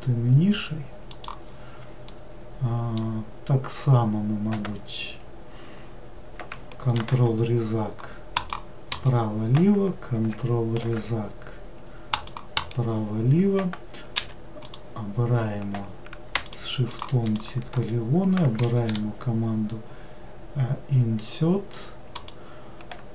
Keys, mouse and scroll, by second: 2.0-4.0 middle drag, 4.0-5.6 scroll up 1, 5.6-6.9 scroll up 1, 6.9 ctrl+r, 10.8 ctrl+r, 14.1 3, 14.6 click, 16.4 shift+click, 16.9 shift+click, 17.2 shift+click, 18.8 i.